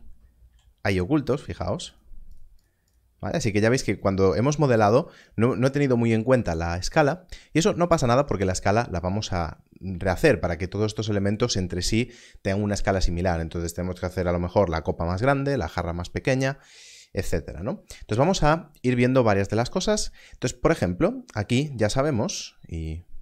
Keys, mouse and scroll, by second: 0.4 z, 1.9 click, 21.6 Left.